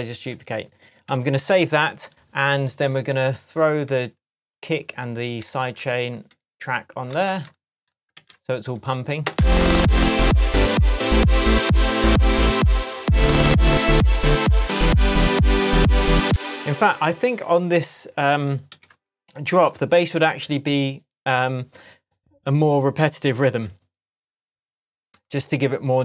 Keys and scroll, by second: 0.1 super+z, 1.1 super+s, 7.3 super+c, 8.2 super+v, 9.2 super+space, 16.2 space, 18.7 super+d.